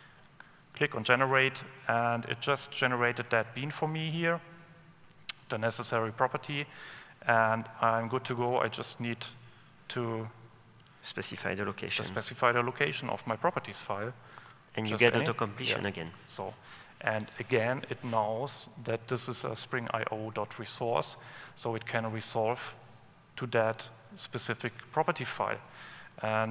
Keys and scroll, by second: 7.4 Escape, 9.7 ctrl+space, 12.6 Escape, 13.1 ctrl+space, 14.5 Return, 25.8 super+e.